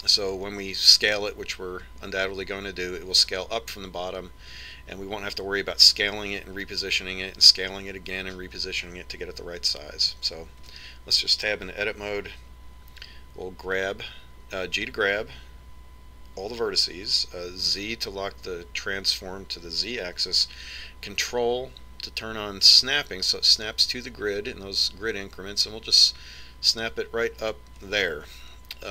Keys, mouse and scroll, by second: 12.1 Tab, 15.2 g.